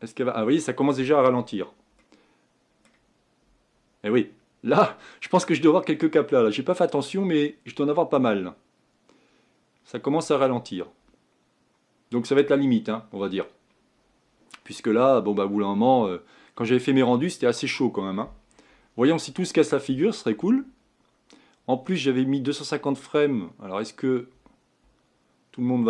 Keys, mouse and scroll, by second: 2.3-25.8 middle drag.